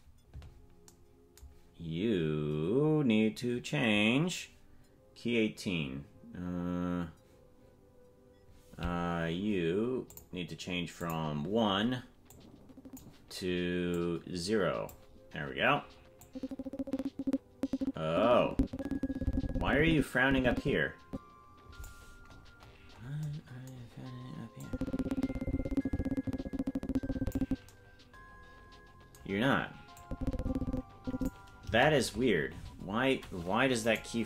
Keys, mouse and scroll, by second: 0.0 click, 10.1-11.1 drag, 12.4 click, 13.9-15.0 drag, 16.3-21.9 drag, 22.3-23.2 scroll up 16, 24.6-27.4 drag, 30.0-31.3 drag, 31.6 KP_0, 33.8 right click.